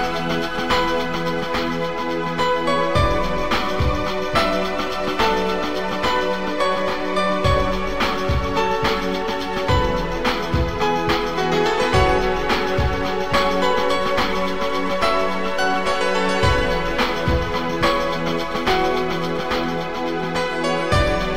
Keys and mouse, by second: 0.7 click, 1.3 click, 2.6 click, 4.2 shift+click, 6.1 shift+click, 7.4 click, 9.0 click, 9.9 Delete, 10.5 click, 10.7 Delete, 13.4 click, 15.8 click, 16.4 click, 17.6 shift+click, 20.7 click, 21.1 right click.